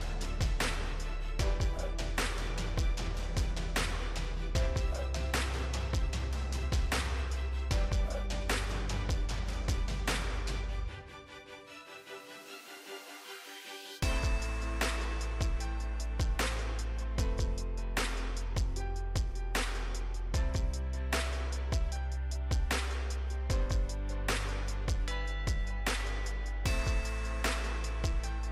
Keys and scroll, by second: 1.4 ctrl+z, 3.7 ctrl+d.